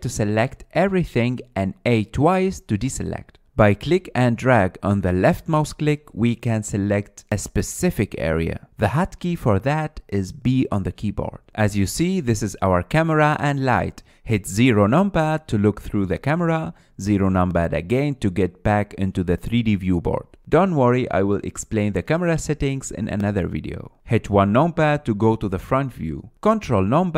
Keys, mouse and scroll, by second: 1.1 a, 1.5-2.0 scroll down 3, 2.0-2.8 middle drag, 2.8 a, 3.0 a, 3.8 scroll up 2, 4.0-4.8 middle drag, 4.8 click, 5.9 click, 7.4 click, 8.2 click, 9.1 click, 10.4-11.1 drag, 11.1 b, 12.4-13.0 drag, 13.0-15.8 middle drag, 15.8 KP_0, 18.3 KP_0, 21.6-25.7 middle drag, 25.7 KP_1.